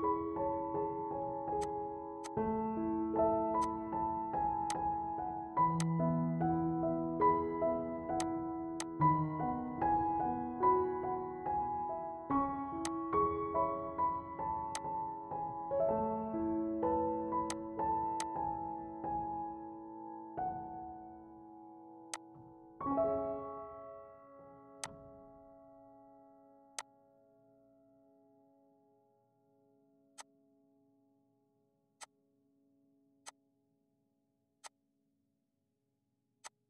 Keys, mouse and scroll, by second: 1.6 click, 3.6 click, 3.7 click, 6.8 ctrl+z, 8.2-10.4 shift+drag, 10.4 ctrl+z, 12.8 click, 16.1 ctrl+z, 17.6-20.0 drag, 20.0 ctrl+z, 27.8-29.9 drag, 30.3-36.6 drag.